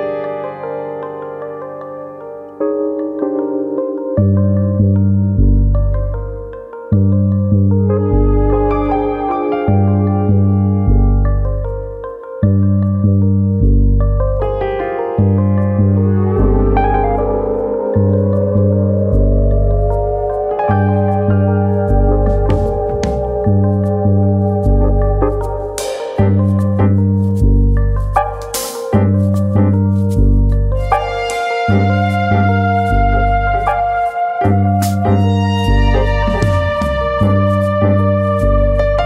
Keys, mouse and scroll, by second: 0.0-0.4 scroll down 4, 0.2 Tab, 0.4 middle click, 0.8 middle click, 1.1 scroll up 2, 1.2 Tab, 1.5 middle click, 2.4 middle click, 4.2-4.8 scroll down 1, 4.8 KP_1, 8.6 click, 9.0 middle click, 10.0 ctrl+click, 10.8 g, 11.9 right click, 11.9 middle click, 13.1 KP_1, 14.1 click, 14.8 g, 16.2 click, 16.5 click, 17.3 g, 17.7 click, 18.4 ctrl+r, 23.9 click, 25.4 click, 26.2 shift+click, 26.5 shift+click, 26.8 click, 28.1 click, 28.6 shift+click, 28.7 shift+click, 29.4 click, 31.6 1, 31.7 click, 32.5 click, 33.6 shift+click, 34.0 shift+click, 34.4 click, 35.3 click, 35.9 shift+click, 36.1 shift+click, 37.2 click, 37.8 click.